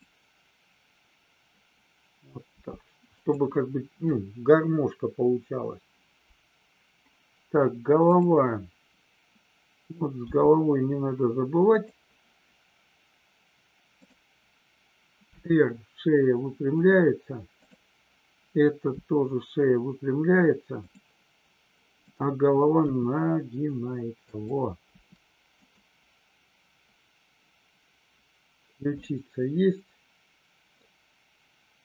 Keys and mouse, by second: 3.2 click, 8.0 click, 11.6 click, 15.2 r, 16.8 click, 17.5 click, 18.8 r, 20.8 click, 21.9-22.6 drag, 22.8 r, 24.3 click, 24.9 r, 25.5 click, 28.9-30.8 middle drag.